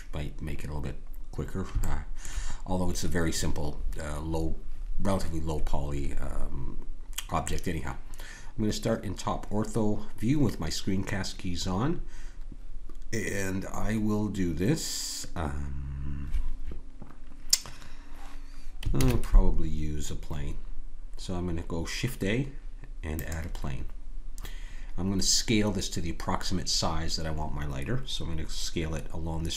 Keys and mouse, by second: 0.6-5.0 middle drag, 19.0 shift+a.